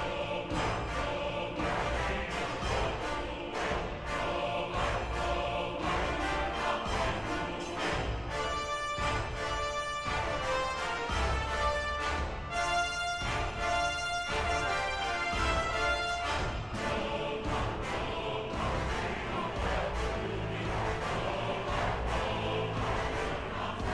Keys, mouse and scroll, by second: 1.5 ctrl+-, 1.7 ctrl++, 1.9 ctrl+-, 2.7 ctrl++, 2.9 ctrl++, 3.6 right click, 11.5 ctrl++, 15.2 ctrl++, 15.5 ctrl++, 16.7 ctrl+-, 17.4 ctrl+-, 17.4 ctrl++, 17.8 b, 18.3 b, 21.0 ctrl+-.